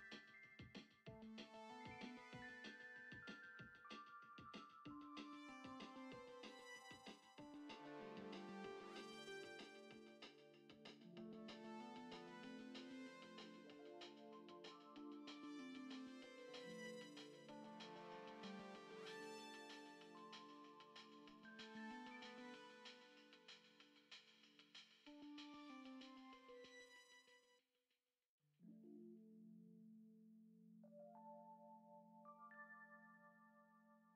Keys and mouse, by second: 4.2 click, 5.2-6.4 drag, 6.9 click, 8.8 click, 11.1 click, 12.7 click, 13.2-14.3 drag, 14.3 Tab, 15.5 click, 16.0 alt+shift+click, 16.8 alt+shift+click, 17.8 shift+middle click, 18.4-19.1 alt+shift+drag, 19.6-19.9 shift+middle drag, 20.7 shift+click, 21.4 alt+shift+click, 22.3 alt+shift+click, 23.3 shift+middle click, 23.8 shift+click, 24.1 shift+middle click, 24.8 alt+shift+click, 25.1 shift+click, 25.6 shift+middle click, 26.0-26.4 shift+drag, 27.8 click, 28.5 Tab, 29.2 shift+middle click, 31.6 F6, 31.6 n, 32.0 shift+middle click, 32.9 u.